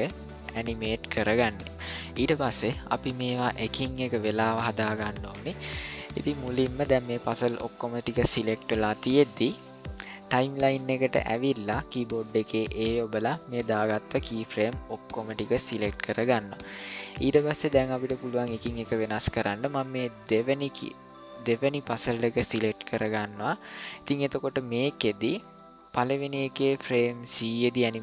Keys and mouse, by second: 0.7-1.3 shift+middle drag, 6.0 ctrl+middle click, 12.6 a, 20.2 click.